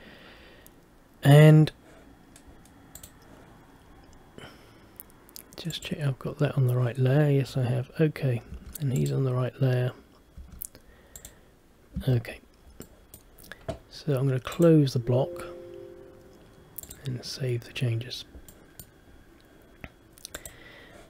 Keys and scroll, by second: 8.6 Escape, 10.5 Escape, 12.2 Escape.